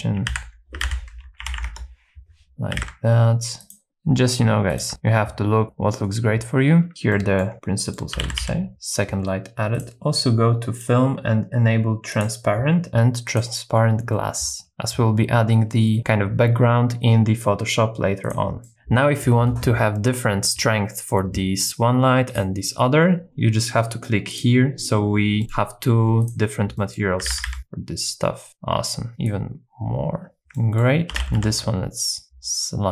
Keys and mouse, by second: 0.3 alt+r, 0.8 x, 1.4 KP_9, 1.5 KP_0, 1.7 KP_Enter, 2.7 r, 2.8 z, 3.7 click, 3.9 g, 3.9 shift+z, 4.8 shift+click, 7.1 middle click, 7.5-8.5 middle drag, 8.2 g, 8.4 z, 8.7 x, 10.9 click, 12.1 click, 13.3 click, 18.7-19.7 middle drag, 21.6 click, 22.3 click, 25.4 middle click, 26.8 middle click, 27.2 r, 27.3 z, 27.5 z, 29.2-30.4 shift+drag, 30.6 middle click, 31.1 g, 31.4 x.